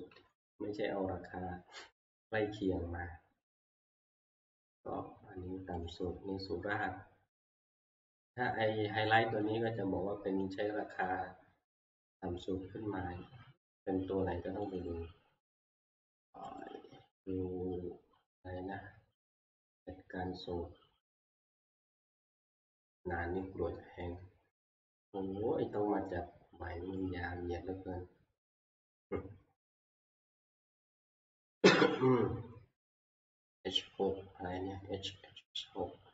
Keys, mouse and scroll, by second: 0.2 Right, 5.9-8.5 drag, 9.6 click, 10.6 click, 14.8 click, 16.5 click, 16.6 click, 19.4 click, 27.3 click, 27.3 click, 28.2 click, 28.8 click, 30.4 click.